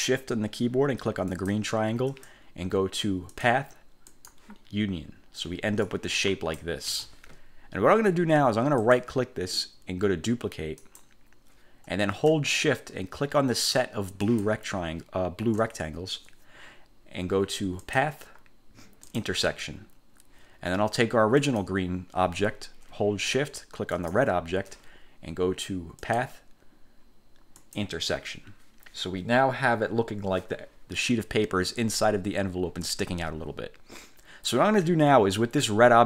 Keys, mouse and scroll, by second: 1.4 shift+click, 3.4 click, 4.2 click, 6.0-6.9 drag, 7.0 ctrl+z, 8.9 click, 10.9 click, 14.4 shift+click, 18.0 click, 19.2 click, 21.5 click, 24.0 shift+click, 26.1 click, 27.7 click.